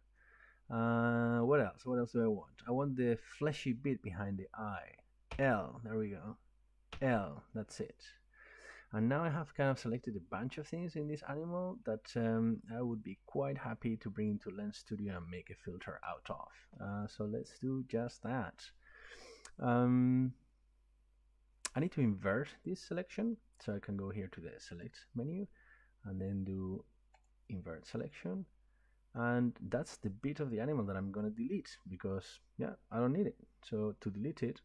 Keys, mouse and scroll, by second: 1.0-2.4 middle drag, 3.0-7.7 middle drag, 5.3 ▯, 6.9 ▯, 7.8 middle click, 8.0 middle click, 10.7 middle click, 11.3-11.7 scroll, 12.9 shift+middle click, 15.8 middle click, 17.0 middle click, 24.8 click, 27.4 click, 31.9 middle click, 33.1-34.6 middle drag.